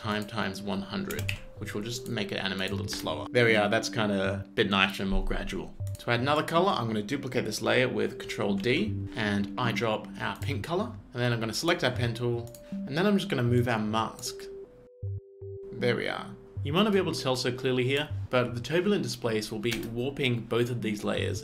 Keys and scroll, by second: 1.2 BackSpace, 1.4 1, 3.0 space, 5.8 z, 8.3 ctrl+z, 8.6 ctrl+d, 15.6 space, 19.8 space.